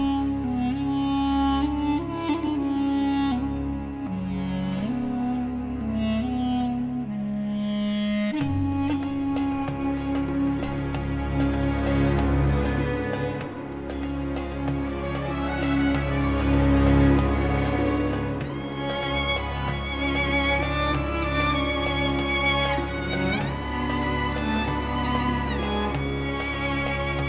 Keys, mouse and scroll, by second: 0.6 click, 2.1 click, 2.7-3.1 scroll down 2, 3.4 scroll up 2, 4.6 click, 5.3 Delete, 6.2-9.1 drag, 9.3 scroll down 2, 9.8-10.2 scroll up 2, 11.2 click, 12.3-15.6 drag, 16.1 click, 17.6 click, 19.8 click, 21.2 click, 22.0 click, 23.6 4, 24.1 0, 25.2 click.